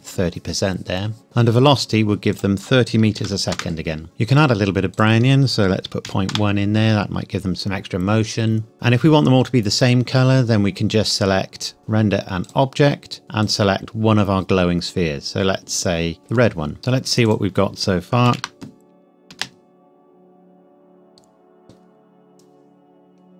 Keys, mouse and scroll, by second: 1.2-2.2 scroll down 1, 2.3 click, 3.2 KP_3, 3.5 KP_Enter, 4.0-5.0 scroll down 1, 5.0 click, 5.9 KP_Decimal, 6.1 KP_1, 6.3 KP_Enter, 8.2-9.1 scroll down 1, 10.3-11.3 scroll down 1, 11.3-11.8 scroll up 1, 11.8 click, 13.1-13.4 scroll down 1, 13.4 click, 16.2 click, 17.3 click, 18.3 ctrl+s, 19.3 space.